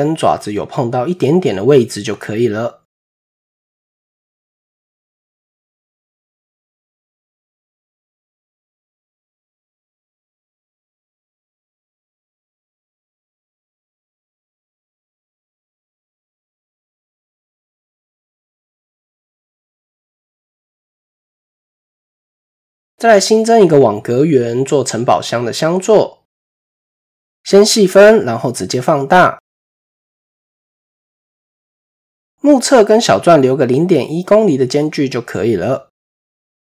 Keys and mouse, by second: 4.6 middle click, 6.3 click, 7.5-8.8 middle drag, 9.1 shift+middle click, 10.1 middle click, 11.4-12.6 drag, 12.9 middle click, 13.5 KP_7, 17.6 shift+middle click, 18.3 KP_7, 19.2 shift+middle click, 20.4 shift+middle click, 21.7 click, 22.1 shift+click, 22.6 shift+a, 25.5 click, 26.8 ctrl+3, 27.3-27.8 shift+middle drag, 28.5 shift+middle drag, 29.0 s, 31.8-32.1 shift+middle drag, 33.0 s.